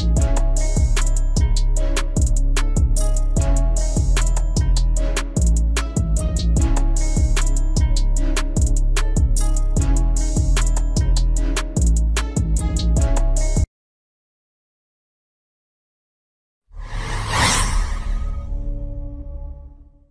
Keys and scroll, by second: 8.6 F4, 11.5 ctrl+x.